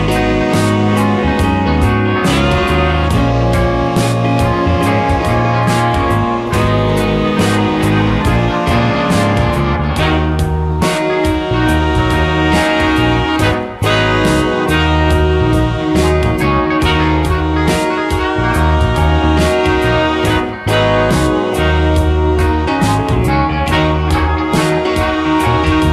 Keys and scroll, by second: 3.3 space, 6.4 space.